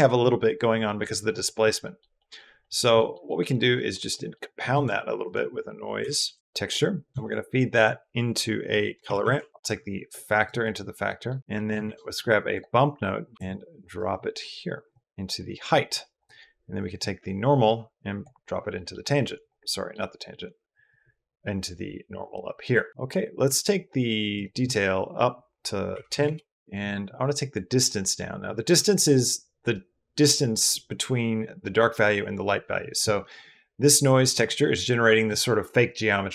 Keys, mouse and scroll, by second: 0.6 middle drag, 1.8 middle click, 2.2 middle click, 2.6 middle drag, 2.8 middle click, 3.2 middle click, 3.7 middle click, 4.1 middle click, 4.5 shift+a, 7.1 shift+a, 9.5 click, 10.4 click, 10.9 click, 11.5 shift+click, 11.7 shift+a, 13.8 click, 14.0 click, 15.1 drag, 16.0 click, 16.8 click, 17.5 click, 18.5 middle click, 19.5 middle click, 20.7-22.2 drag, 24.2-26.1 drag, 33.9 click, 34.0 click, 34.4 click, 34.9 click.